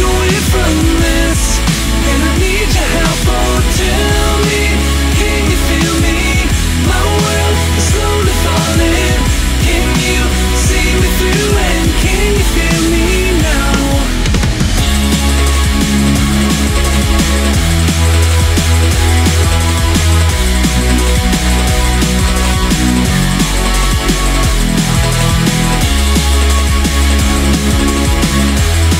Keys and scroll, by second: 1.4-1.9 scroll up 1, 1.9 ctrl+z, 2.5 ctrl+z, 2.7 scroll down 1, 3.4 scroll down 1, 3.6-4.9 scroll up 1, 4.9 scroll down 1, 5.2 scroll up 1, 13.3-18.1 scroll up 1, 23.5 ctrl+z, 27.4 scroll down 1.